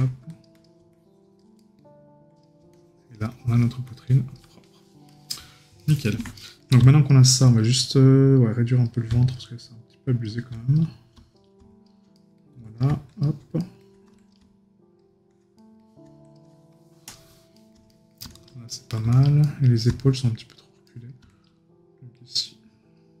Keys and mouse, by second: 1.6 right click, 5.8 right click, 12.1 right click, 13.6 right click, 15.6 right click, 17.5 right click, 20.9 right click.